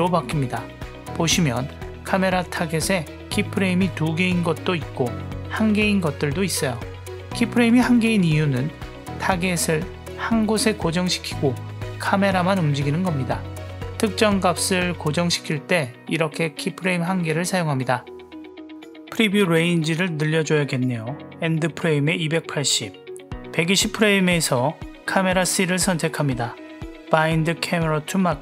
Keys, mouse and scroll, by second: 0.9 click, 2.5 click, 3.3 click, 4.0 click, 5.9 click, 6.7 click, 12.7-16.2 drag, 20.0-21.7 drag, 23.0 drag, 25.2 click, 26.7-28.4 drag.